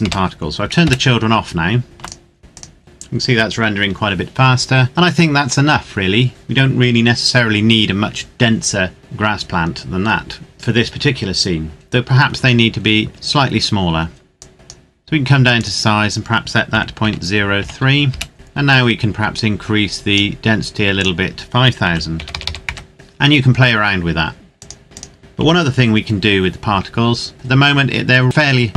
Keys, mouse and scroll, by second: 0.8 KP_Enter, 1.8 ctrl+s, 2.0 click, 2.5 click, 14.5 click, 16.8 KP_Decimal, 17.0 KP_0, 17.6 KP_3, 18.2 KP_Enter, 19.6 click, 21.9 KP_5, 22.3 KP_0, 22.7 KP_Enter, 24.8 click, 25.5 KP_7.